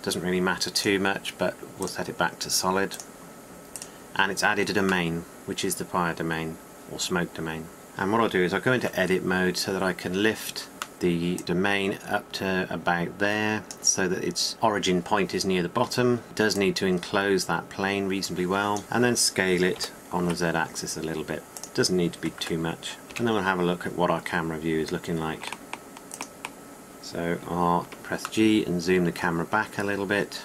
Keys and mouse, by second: 4.1-7.8 drag, 7.8 KP_1, 9.3 Tab, 10.9 KP_1, 11.4 click, 12.9-16.2 middle drag, 16.2 Tab, 20.3 s, 22.3 Tab, 23.0 Tab, 23.7 KP_0, 26.6 click, 28.3 g.